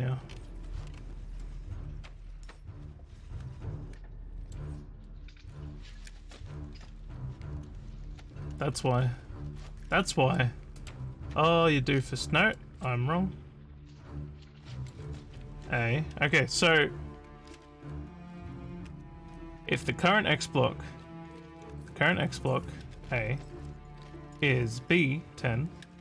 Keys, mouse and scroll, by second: 0.3 scroll, 1.4-4.6 middle drag, 8.9 scroll down 1, 9.5 scroll down 2, 10.4 middle click, 11.3 scroll down 3, 12.0 scroll down 3, 12.6-14.9 middle drag.